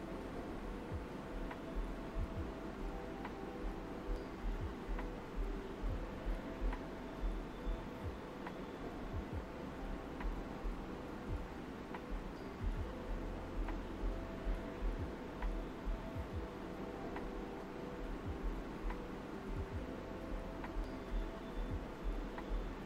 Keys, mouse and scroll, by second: 7.4 space, 8.1 click, 8.4 space, 9.1 click, 9.7-12.2 alt+right drag, 10.7 typing, 13.0 alt+right click, 13.8 alt+right click, 15.0 click, 15.6 ctrl+z, 16.5 alt+click, 18.0 shift+click, 18.8 right click, 20.1 alt+right click.